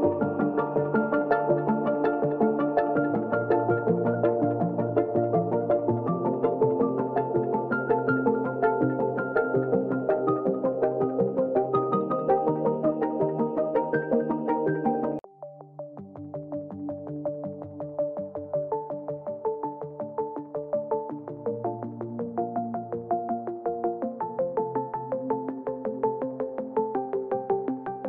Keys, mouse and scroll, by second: 3.0-3.6 drag, 5.4-5.9 drag, 8.6 ctrl+z, 9.1 ctrl+shift+z, 9.9 click, 10.4 t, 10.9 click, 12.5-13.5 drag, 14.3 click, 15.3 click, 18.6 Down, 19.6 click, 20.4-21.3 scroll down 1, 21.3 click, 22.3 ctrl+a, 22.5 ctrl+space, 22.6 ctrl+click, 22.7 ctrl+space, 23.4 click, 24.6 ctrl+d, 24.8 ctrl+t, 25.6-27.6 shift+drag, 27.7 ctrl+a.